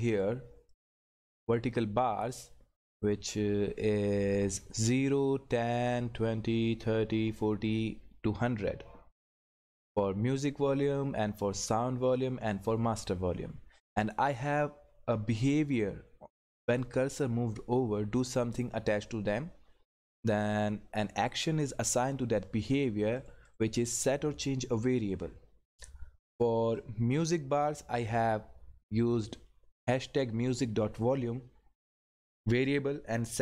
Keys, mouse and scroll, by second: 0.1 click, 16.7 click, 23.2 click, 26.7 click.